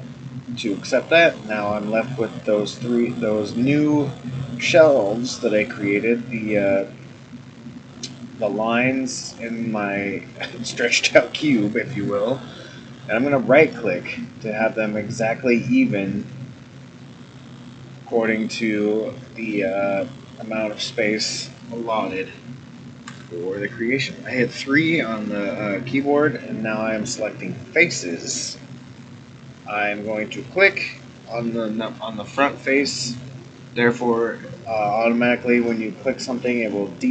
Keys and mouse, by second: 17.0-21.2 middle drag, 23.0 3, 30.4 click.